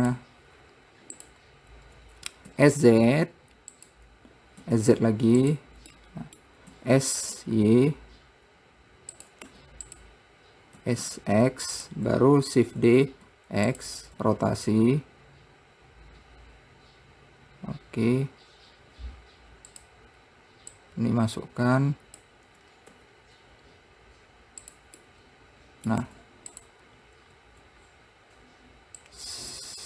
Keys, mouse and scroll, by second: 1.7-2.9 drag, 2.9 s, 5.0 s, 6.4 middle click, 7.1 s, 9.9 `, 11.2 s, 13.0 shift+d, 14.5 r, 20.6 scroll up 1, 21.2 click, 23.3 r, 25.4-26.5 middle drag, 26.5 `, 29.4 click.